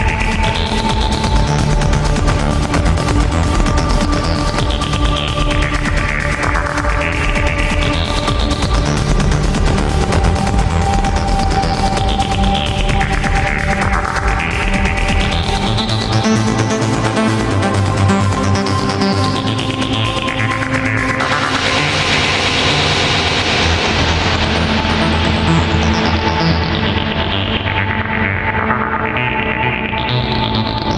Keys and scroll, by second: 0.0 ctrl+z, 0.9 ctrl+z, 1.7 alt+space, 2.6 alt+space, 4.5 ctrl+z, 7.7 ctrl+z, 9.4 ctrl+z, 11.1 alt+space, 11.4 alt+space, 12.4 alt+space, 13.5 alt+space, 14.6 ctrl+z, 16.6 alt+space, 17.5 alt+space, 21.5 alt+space, 26.4 ctrl+z, 29.0 ctrl+z, 30.0 ctrl+z.